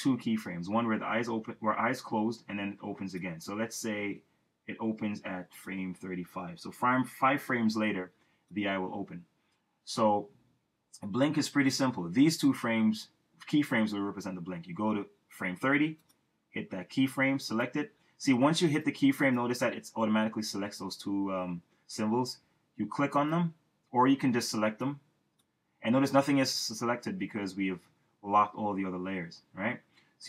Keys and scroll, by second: 7.4 F6.